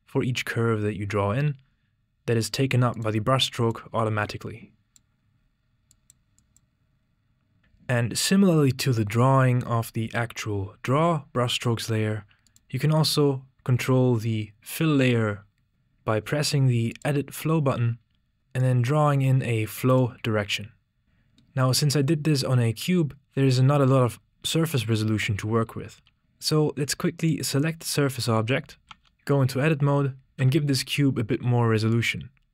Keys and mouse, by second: 6.1 typing, 15.4 click, 17.3-18.3 drag, 18.3 typing, 20.3 right click, 26.2 typing, 27.1 click, 29.0 Tab, 30.1-30.8 typing.